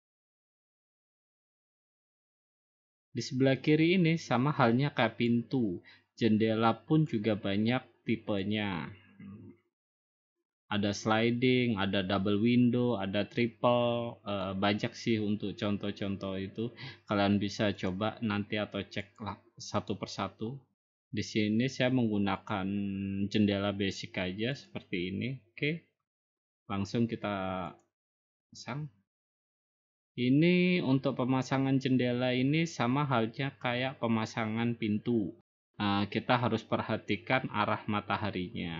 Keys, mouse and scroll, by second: 0.1-1.2 middle drag, 7.0-8.1 drag, 14.4-15.5 drag, 16.2 middle click, 17.9 click, 19.2 click, 19.9 click, 22.5 click, 24.7-25.7 drag, 27.8-29.0 drag.